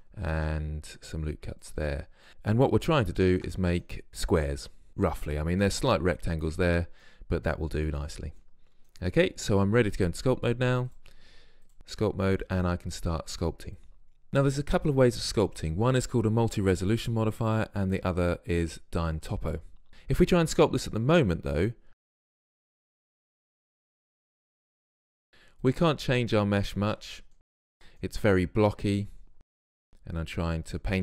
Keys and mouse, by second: 13.9-14.3 drag, 21.4-22.3 drag, 24.5-27.5 middle drag, 25.7-27.5 drag, 27.5 ctrl+z, 27.7 ctrl+z, 29.9-31.0 drag.